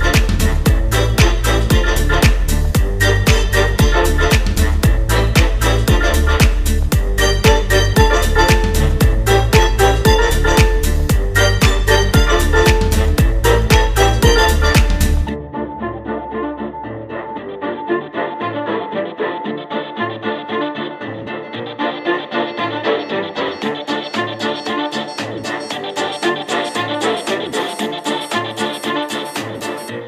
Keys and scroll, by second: 11.7 space, 14.0 space, 14.3 space, 16.8 space, 18.3 space, 19.1 space, 20.2 space, 22.0 space, 22.7 space, 23.7 space, 24.9 space, 25.4 space, 27.0 space.